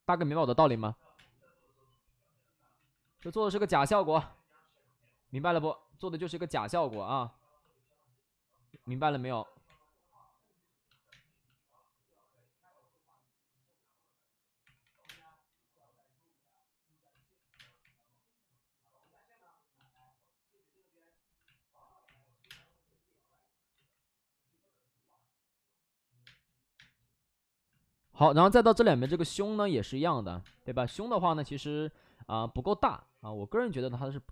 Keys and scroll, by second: 0.0-1.0 typing, 2.7 ctrl+z, 2.9 ctrl+z, 3.1 space, 6.2 1, 6.8 1, 7.5 ctrl+z, 8.6 1, 9.6 3, 11.0 space, 14.5 space, 14.6 3, 14.7 3, 15.0 space, 17.4 3, 17.5 space, 20.8 3, 22.0 3, 22.3 3, 22.4 space, 23.6 space, 23.7 ctrl+z, 26.2 space, 26.7 space, 28.1 x, 29.1 space, 30.3 space, 30.6 3, 31.0 3, 32.3 2.